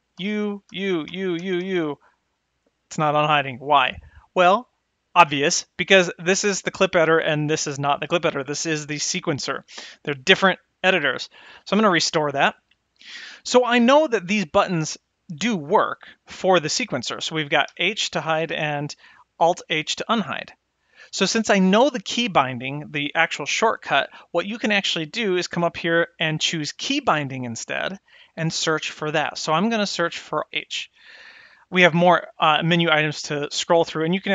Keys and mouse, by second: 0.3-1.7 typing, 12.0 click, 17.7 h, 19.5 h, 26.9 click, 28.2-31.4 drag.